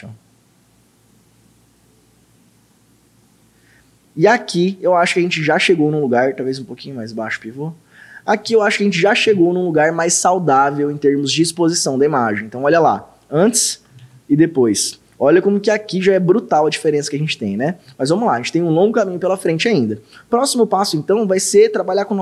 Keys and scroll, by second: 12.8 ctrl+d, 14.0 ctrl+d.